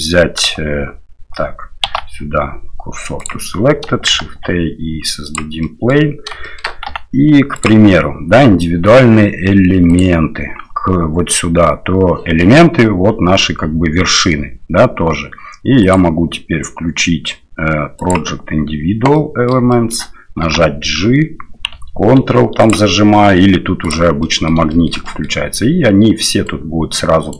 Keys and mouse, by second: 1.9 shift+s, 4.2 shift+a, 5.6 middle click, 6.4 shift+middle click, 6.9 s, 10.0-12.3 drag, 15.8-18.9 drag, 19.1 middle click, 19.7 shift+middle click, 20.4 g, 23.8 click, 24.2 middle click, 24.7 shift+middle click, 25.0 middle click, 26.4 click.